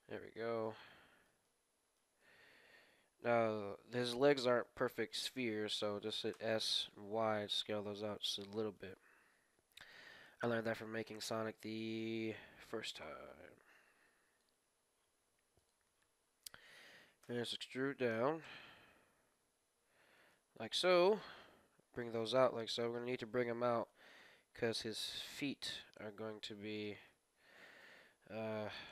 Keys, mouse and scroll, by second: 0.1-7.5 middle drag, 6.3 s, 7.6 middle click, 9.1-11.0 middle drag, 10.7 KP_3, 11.1-13.0 middle drag, 12.2 click, 13.4 click, 13.4 KP_3, 16.0-18.4 middle drag, 17.1 e, 20.7 KP_1, 21.7 g, 24.2 r, 26.0 g, 27.0-28.9 middle drag.